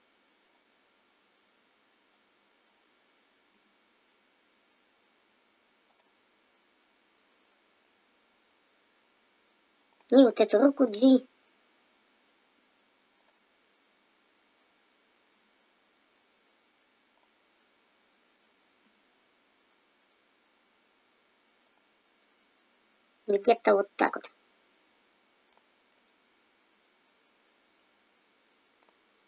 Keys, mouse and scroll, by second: 0.4 click, 3.5 r, 6.8 middle click, 10.0 middle click, 10.0 click, 10.9 g, 13.4 middle click, 15.4 g, 18.1 middle click, 18.9 g, 21.9 middle click, 25.6 click, 25.9 middle click, 28.8 middle click, 28.9 click.